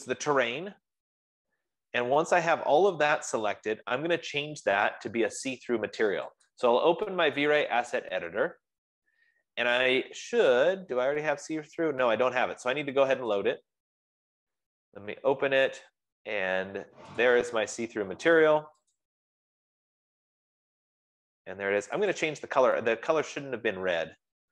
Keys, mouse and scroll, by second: 6.8 click, 10.9-11.4 scroll, 13.4 middle click, 14.0-19.3 drag, 22.5 click.